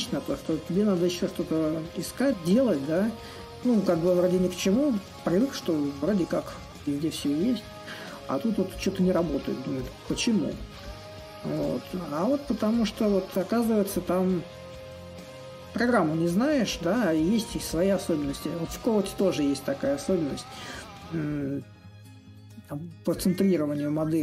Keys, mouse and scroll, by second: 0.0-5.0 drag, 5.9-10.9 drag, 11.3-16.3 drag, 16.9-21.9 drag, 22.9-24.2 drag.